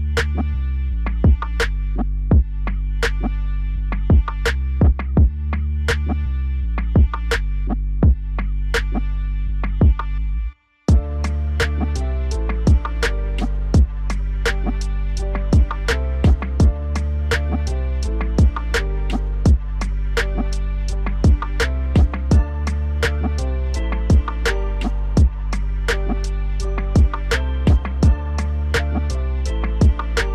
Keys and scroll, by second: 24.5 F4.